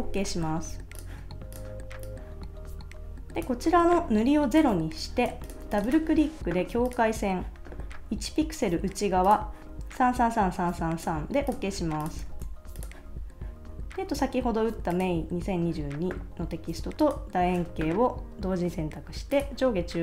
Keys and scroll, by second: 12.2 super+s.